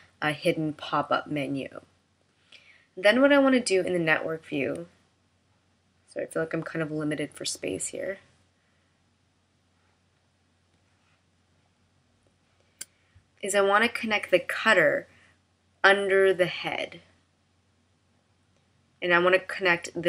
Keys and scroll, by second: 10.7 space.